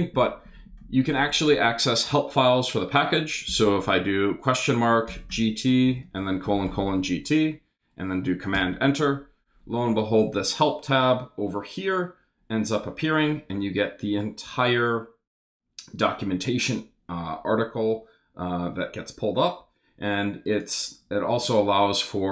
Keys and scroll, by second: 3.5 shift+/, 4.8-7.1 typing, 7.3 super+t, 8.5 super+Return.